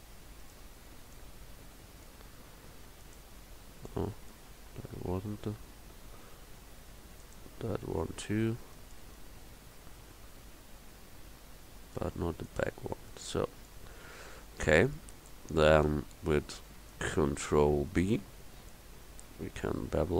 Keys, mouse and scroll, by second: 12.5-13.7 middle drag, 18.5 ctrl+b.